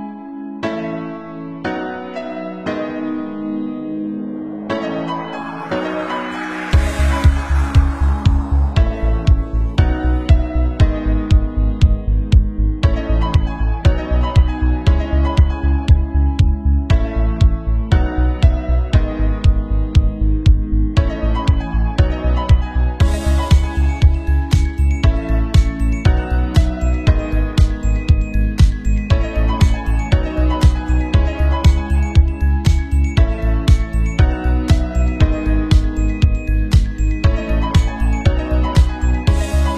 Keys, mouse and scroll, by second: 0.2 e, 0.4 Tab, 0.4-1.4 drag, 1.0 Tab, 1.1 shift+z, 1.1 a, 1.4-2.7 right drag, 1.6 shift+r, 2.0 click, 2.0 middle click, 2.9 Tab, 3.0-4.1 typing, 3.8 Tab, 4.0 Tab, 4.0 middle click, 4.2 Tab, 4.4 Tab, 4.8 middle click, 4.9 Tab, 5.0 Tab, 5.4 middle click, 6.4 Tab, 6.5 Tab, 6.8 Tab, 6.8-8.8 typing, 7.2 Tab, 7.6 click, 8.1 Tab, 8.7 Tab, 10.0 Tab, 10.0 shift+z, 10.2 shift+click, 10.5 r, 10.7 shift+middle click, 10.8-14.0 drag, 13.2 Tab, 13.3 a, 14.0 ctrl+a, 14.0 ctrl+middle click, 14.4-15.4 drag, 14.9 Tab, 15.1 Tab, 15.2 shift+z, 15.2 a, 15.4 shift+middle click, 15.5 shift+r, 15.7 shift+z, 15.7 shift+click, 15.8 middle click, 16.4 click, 16.9 Tab, 16.9-18.0 shift+middle drag, 18.2-19.0 typing, 18.2 shift+click, 18.6 Tab, 18.6 shift+middle click, 18.9 drag, 19.0 Tab, 19.4 middle click, 20.1 r, 20.9-21.3 middle drag, 21.2 Tab, 21.3 shift+z, 21.7 shift+middle click, 21.7 shift+z, 22.0 Tab, 22.0 click, 22.0 right click, 22.1 Tab, 22.4 Tab, 22.4 click, 22.4 right click, 22.6 click, 22.6 right click, 22.7 r, 23.2 shift+d, 23.4 s, 23.5 middle click, 23.5 r, 23.8-25.1 drag, 24.6 v, 24.8 r, 25.1 shift+middle click, 25.2 Tab, 25.3 shift+z, 25.3 click, 25.6 shift+z, 25.7 Tab, 26.1-27.9 shift+middle drag, 27.6 Tab, 27.6 KP_1, 27.9 Tab, 28.0 Tab, 28.0 middle click, 28.4 o, 28.4 shift+z, 28.7 middle click, 28.7 shift+z, 28.9 Tab, 29.2 click, 29.2-30.3 shift+middle drag, 30.3 shift+click, 30.4-31.7 typing, 30.5 Tab, 30.7 ctrl+r, 30.8-33.2 middle drag, 31.1 Tab, 31.2 Tab, 31.4 Tab, 31.7 Tab, 32.6 Tab, 32.9 Tab, 33.5-35.0 middle drag, 34.7 Tab, 35.0 shift+click, 35.3 Tab, 35.4 KP_2, 35.5 middle click, 35.6 ctrl+shift+click, 35.7 ctrl+KP_3, 35.7 Tab, 36.0 middle click, 36.5 shift+click, 37.1 Tab, 37.2-39.0 typing, 37.2 alt+click, 37.3 middle click, 37.7 alt+click, 38.0 Tab, 38.0 middle click, 38.2 Tab, 38.8 Tab, 39.0 alt+shift+middle click.